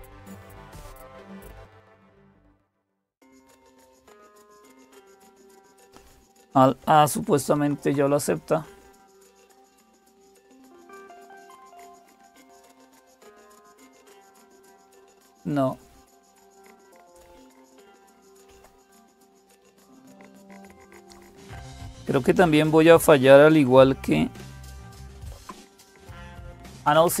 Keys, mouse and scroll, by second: 0.0-27.2 typing, 3.4 Up, 4.1 Return, 7.3 alt+a, 15.4 click, 16.6 Up, 18.3 Up, 19.0 Down, 19.6 Down, 24.9 alt+super+d, 26.6 Down, 26.8 Down, 27.1 Up.